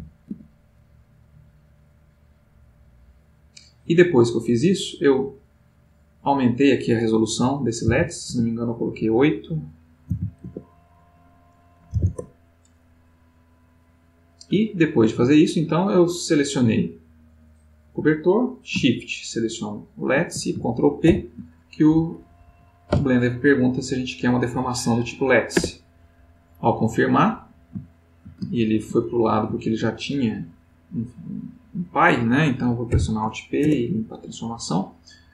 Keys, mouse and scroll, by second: 0.5 z, 1.9-5.8 drag, 6.5 click, 8.0 8, 8.3 Tab, 10.0 5, 10.4 Tab, 11.9 5, 12.0 Return, 13.1-15.5 middle drag, 16.3 click, 19.5 shift+click, 21.0 ctrl+p, 25.5 Return, 27.8-28.3 ctrl+middle drag, 28.7 ctrl+z, 30.1 click, 30.8 click, 31.4 click, 32.9 alt+p, 33.6 alt+Return.